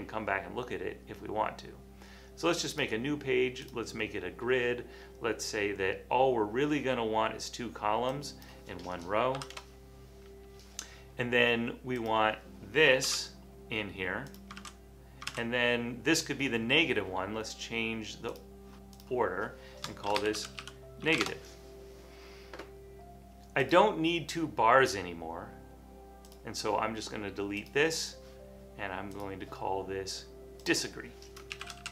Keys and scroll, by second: 9.5 typing, 13.1 super+c, 14.9 super+v, 15.5 super+v, 19.9-21.7 typing, 24.3 typing, 31.4-31.9 typing.